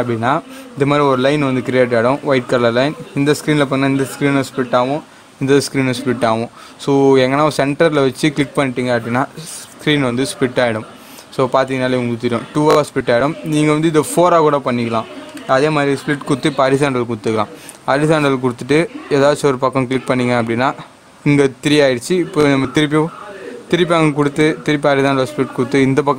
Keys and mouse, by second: 8.3 click, 15.3 right click, 17.2 click, 19.9 click, 24.2 right click, 25.0 click.